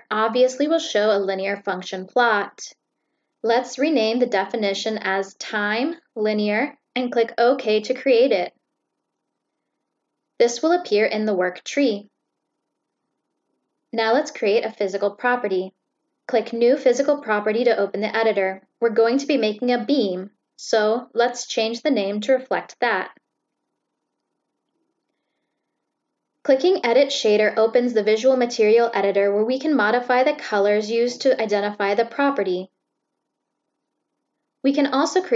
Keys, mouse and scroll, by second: 0.5 click, 3.8 click, 10.2 click, 13.8 click, 17.4 click, 18.6 click, 26.3 click, 27.5 click, 28.4 click, 29.3 click, 31.8 click, 33.1 click, 34.3 click.